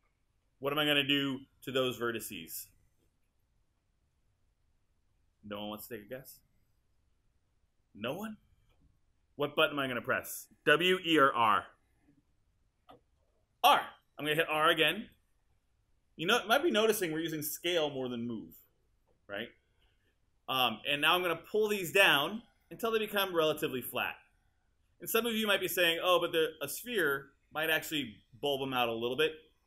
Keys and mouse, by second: 15.1 r.